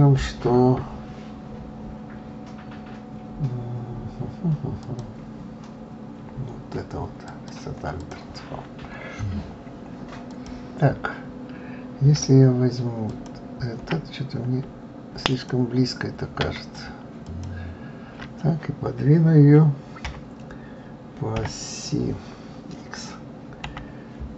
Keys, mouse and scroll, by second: 4.8 click, 7.3 click, 9.2-10.3 scroll up 1, 10.3 click, 13.1 alt+click, 14.0-15.3 scroll down 1, 15.3 alt+click, 17.2 alt+shift+click, 20.0 KP_3, 23.6 x.